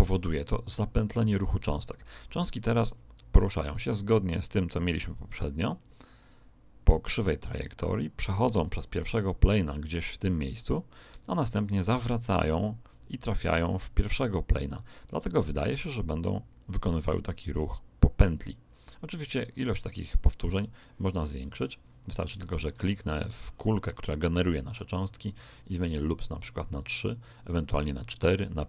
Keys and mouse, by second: 2.8 click, 9.0 right click, 11.8 click, 22.6 right click, 26.0-28.6 drag.